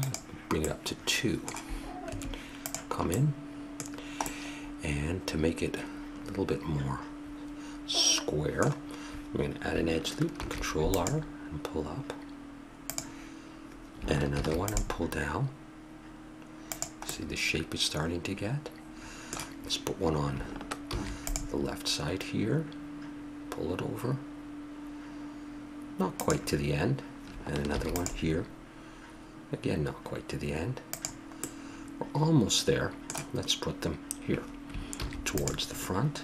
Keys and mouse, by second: 1.9 Tab, 1.9 middle click, 5.5 middle click, 10.2 ctrl+r, 14.2 ctrl+r, 17.0-18.0 middle drag, 20.7 ctrl+r, 27.5 ctrl+r, 31.3-33.2 middle drag, 34.8 ctrl+r.